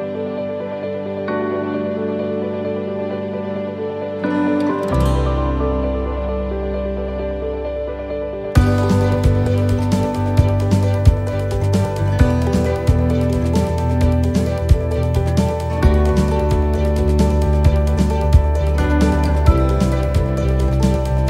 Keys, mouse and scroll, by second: 0.9 shift+right click, 2.5 click, 7.2 click, 9.5 click.